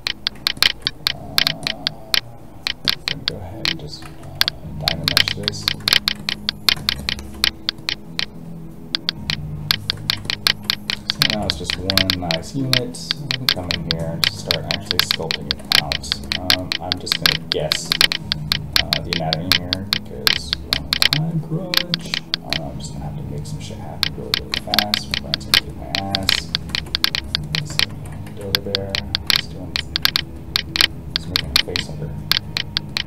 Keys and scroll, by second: 4.0 ctrl+z, 12.6 alt+a, 28.2 alt+a.